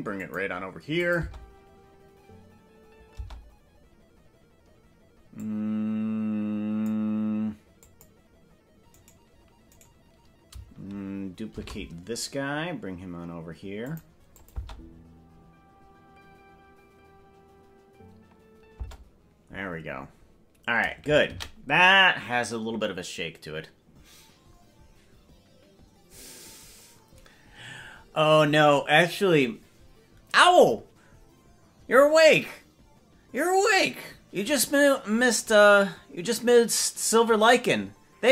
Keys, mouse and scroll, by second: 1.0-3.7 drag, 1.3 space, 3.3 space, 5.5-6.9 drag, 7.8 click, 9.1 right click, 9.9 right click, 11.7 shift+d, 14.4-19.2 drag, 14.7 space, 18.9 space, 24.7 ctrl+s.